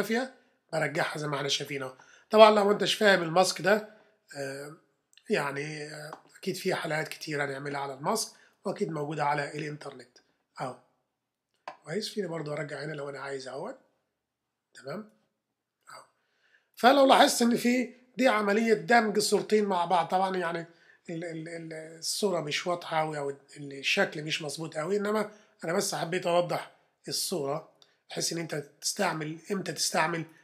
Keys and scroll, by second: 17.6 super+-, 18.3 super+v, 18.9 v, 26.5 super++, 27.2 super+-, 28.4 super+-.